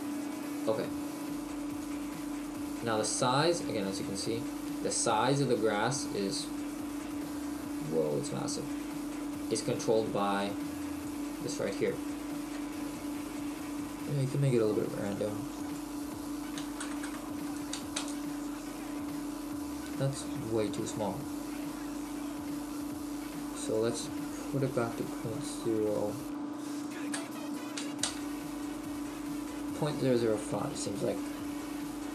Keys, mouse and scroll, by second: 13.8 click, 19.8-20.8 scroll up 11, 20.8-21.1 scroll down 1, 21.5-22.7 scroll up 3, 22.7 scroll down 1, 29.5-30.2 scroll down 1, 30.2 middle click.